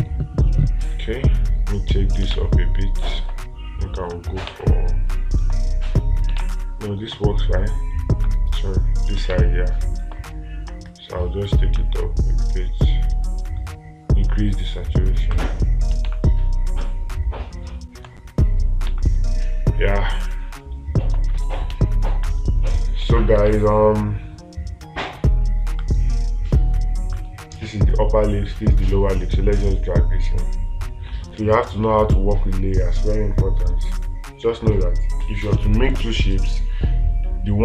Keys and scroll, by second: 2.8 space, 5.0 space, 6.9 space, 9.8 space, 16.5 space, 19.4 space, 24.0 space.